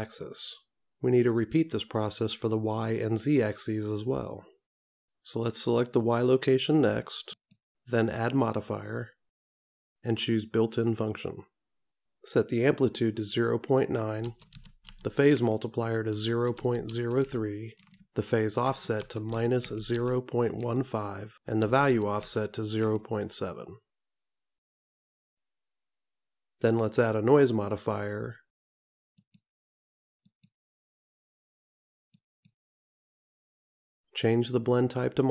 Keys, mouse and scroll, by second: 2.8 click, 6.0 click, 10.4 click, 30.4 click.